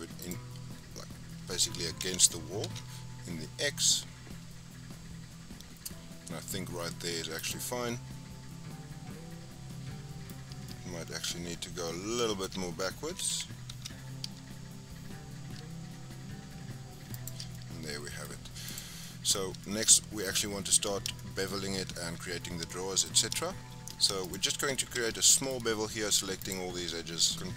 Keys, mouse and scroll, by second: 0.1 click, 0.9-1.9 scroll up 4, 1.9 g, 7.6 scroll down 5, 7.8-10.2 middle drag, 10.2-10.6 scroll up 6, 10.6-13.0 middle drag, 13.0 g, 17.4 scroll down 3, 17.5-18.6 middle drag, 18.6 click, 19.0-19.8 middle drag, 19.8-21.1 scroll up 7, 21.1-21.4 shift+middle drag, 21.4-21.9 scroll up 3, 21.9-22.6 scroll down 4, 22.6-24.2 shift+middle drag, 24.2 click, 24.8 Tab, 25.2 shift+middle click, 25.5-25.8 scroll up 5, 26.3 alt+click, 27.3 alt+shift+click.